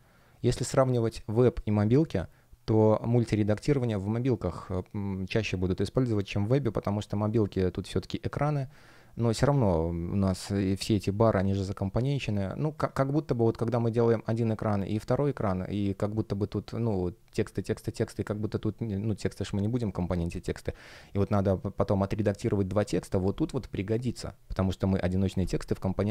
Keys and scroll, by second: 9.3 F1.